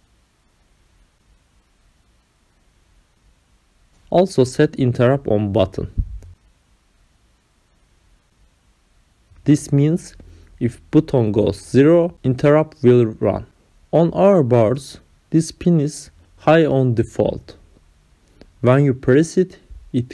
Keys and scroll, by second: 4.9 ctrl+v, 11.4 ctrl+c.